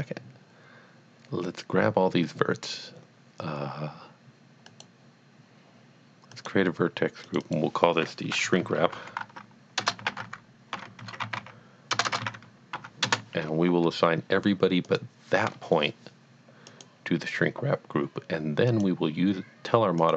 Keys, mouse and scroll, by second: 4.6 middle click, 4.7 click, 6.3 click, 7.4 double click, 7.5 double click, 8.6-12.8 typing, 13.1 Return, 14.9 shift+click, 15.4 click, 18.7 click, 20.0 click.